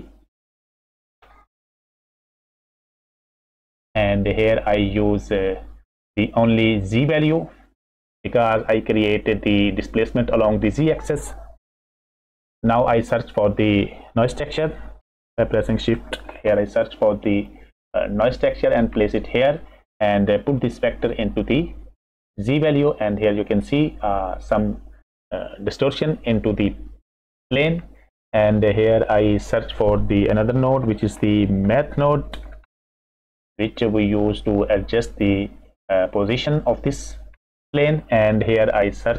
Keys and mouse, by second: 5.4-6.1 middle drag, 8.1 click, 12.0 F6, 13.4 click, 15.2 shift+a, 20.6 click, 20.8-22.4 drag, 28.2 click, 30.7 shift+a, 39.0 click.